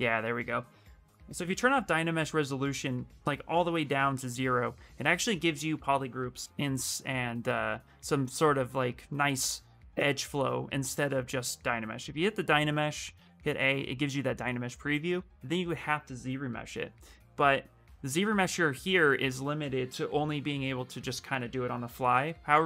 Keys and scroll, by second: 12.9 a, 13.1 a.